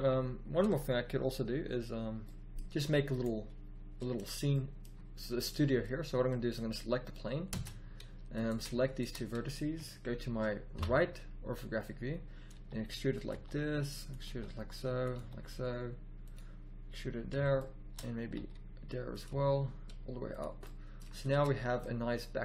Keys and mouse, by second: 1.4-2.2 middle drag, 7.5 Tab, 10.7 KP_3, 12.5 e, 13.3 e, 14.2 e, 15.2 e, 17.5 middle click, 18.3 e, 19.3 e, 21.3 Tab.